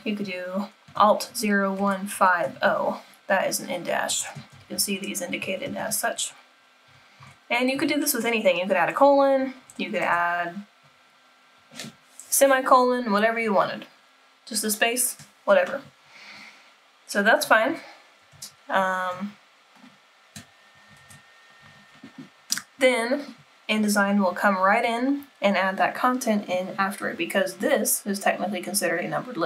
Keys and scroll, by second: 21.1 super+-.